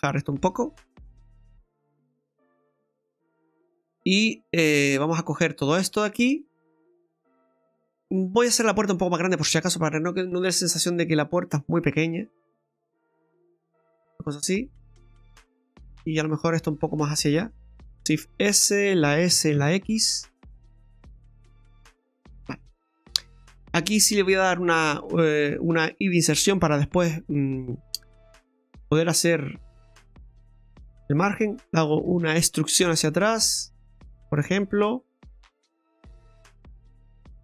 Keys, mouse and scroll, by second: 0.5 click, 2.2 scroll down 1, 2.5 middle click, 3.4 right click, 4.8 click, 5.6 right click, 6.0 shift+right click, 6.6 right click, 7.6 right click, 7.8 middle click, 8.2-8.7 scroll up 3, 9.2 right click, 10.7 click, 11.8 right click, 12.4 shift+right click, 13.1 click, 14.1 scroll down 2, 16.2 right click, 16.7 shift+right click, 18.2 shift+s, 19.2 s, 22.8 scroll up 1, 24.5 click, 25.2 right click, 25.6 shift+right click, 26.5 i, 28.3 i, 30.0 middle click, 30.8 shift+middle click, 32.0 e, 34.6 middle click.